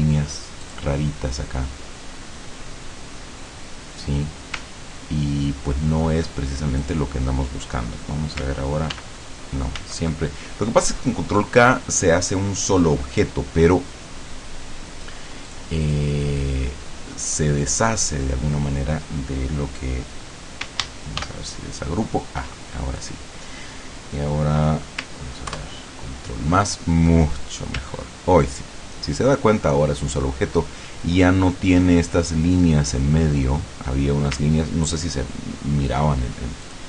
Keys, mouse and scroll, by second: 0.7 click, 4.8 ctrl+scroll down 2, 5.7 ctrl+scroll down 2, 6.9 click, 9.0 ctrl+k, 9.8 ctrl+z, 15.5 click, 15.9 click, 16.5-18.3 drag, 21.3 ctrl+shift+g, 25.5 ctrl+KP_Add, 27.9-28.7 ctrl+scroll up 4, 29.1-30.5 ctrl+scroll down 2, 30.5-31.2 ctrl+scroll up 2, 31.5 ctrl+scroll up 2, 34.5-35.0 ctrl+scroll down 2, 35.7 ctrl+scroll down 2, 36.7 ctrl+click.